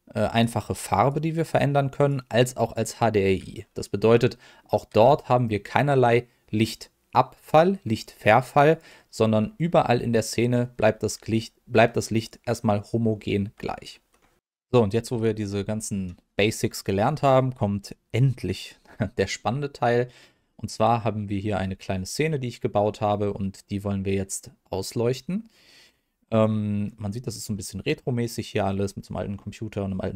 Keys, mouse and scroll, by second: 1.0-2.0 drag, 4.2 middle click, 5.0 r, 8.7 click, 9.4 middle click, 10.9 r, 12.2 click, 19.9 middle click, 20.5 shift+middle click, 21.3-21.6 scroll up 1, 21.6-22.0 scroll down 1, 22.0 middle click, 24.6 middle click, 25.9-26.5 scroll up 1, 26.5 middle click, 27.0-27.4 scroll up 1, 27.5 middle click, 30.0-30.1 scroll down 1.